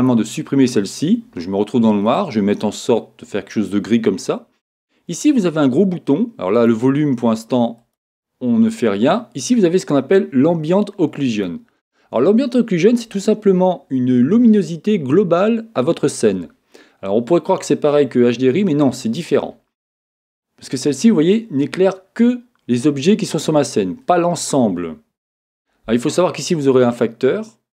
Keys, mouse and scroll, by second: 2.0-3.9 drag, 6.5-9.5 drag, 9.6-11.3 drag, 19.7-21.3 middle drag, 21.3-22.6 scroll up 2, 22.6 scroll up 1, 22.8 middle click, 26.6-27.7 drag.